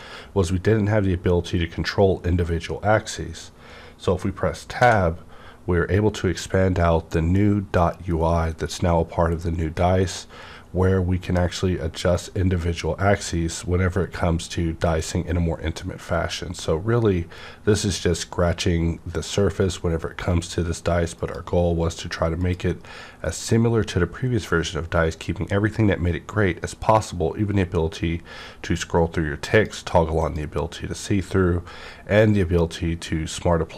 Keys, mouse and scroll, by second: 4.8 Tab, 4.8 scroll up 1, 4.8 -, 11.6 scroll down 1, 12.0 scroll up 1, 13.1-14.0 scroll down 1, 14.0-15.1 scroll up 1, 15.2 scroll down 1, 16.1 scroll up 1, 16.5-16.9 scroll down 1, 16.9 scroll up 1, 19.5 scroll down 1, 21.1 click, 22.4 click, 23.1 scroll down 1, 23.5-24.3 scroll up 1, 24.3-25.2 scroll down 1, 25.2-26.4 scroll up 1, 26.4-26.8 scroll up 1, 26.8-27.9 scroll down 1, 27.9-29.5 scroll up 1, 29.5 click, 30.2 click, 31.1 click, 31.1 scroll down 1, 31.5-33.3 scroll up 1, 33.3 scroll up 1.